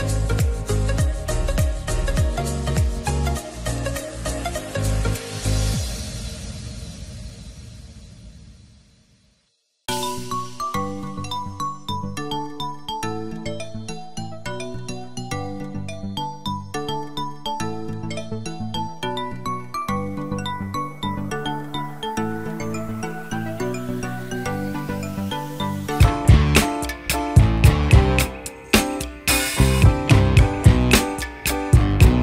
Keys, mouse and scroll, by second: 2.7 double click, 18.2 double click, 28.8 5, 29.1 Return.